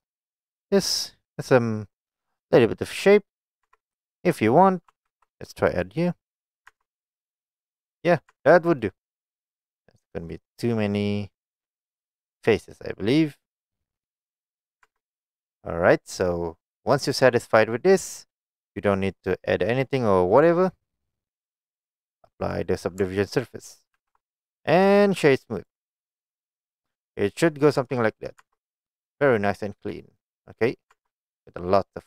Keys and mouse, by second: 0.7-1.7 middle drag, 3.7 Tab, 4.1 shift+middle click, 5.2 ctrl+r, 6.5 right click, 6.8 Tab, 7.2-8.3 middle drag, 8.4 Tab, 8.7 middle click, 9.5 middle click, 11.8-13.6 middle drag, 14.2 middle click, 14.9 Tab, 16.4-17.0 middle drag, 18.3-19.8 middle drag, 20.0 middle click, 20.8-21.5 middle drag, 22.5 click, 24.0 ctrl+a, 25.2 right click, 26.2-26.6 middle drag, 27.1 middle click, 27.9 Tab, 28.1 middle click, 28.5 Tab, 28.8-30.0 middle drag, 30.7 middle click, 31.0 Tab, 31.4-32.0 middle drag.